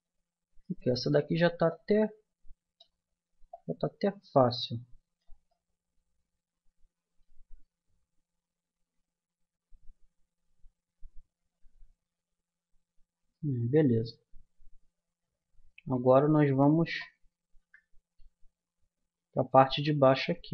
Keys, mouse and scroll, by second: 1.7-3.3 drag, 5.5-7.8 middle drag, 7.8 KP_1, 9.7 KP_3, 13.3-16.5 middle drag, 16.5-17.6 drag, 17.6 KP_Decimal, 19.7 a.